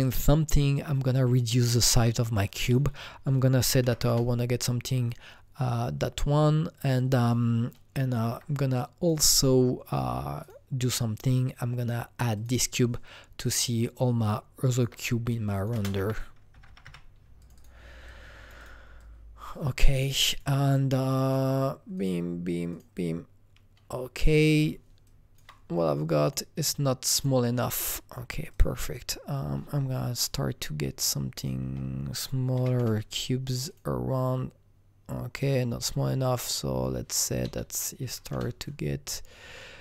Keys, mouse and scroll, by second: 0.0 click, 2.4 click, 2.6 double click, 3.3 KP_0, 3.6 KP_Decimal, 3.8 KP_1, 4.0 KP_Enter, 8.1 KP_Enter, 8.1 KP_1, 8.1 KP_Decimal, 8.7 click, 10.4 click, 12.3 click, 13.5-15.7 shift+drag, 15.7 ctrl+space, 16.0-16.8 typing, 17.4 click, 17.5 double click, 18.0 click, 18.5 double click, 18.9 double click, 19.0-21.2 drag, 21.2 click, 21.9 click, 25.0-27.1 alt+drag, 27.1-28.5 alt+drag, 30.1 click, 30.6-32.7 drag, 31.6 KP_0, 32.5 KP_2, 32.7 KP_Enter, 33.6 click, 35.3 click, 36.2-38.3 drag, 37.4 BackSpace, 38.0 KP_1, 38.3 KP_Enter.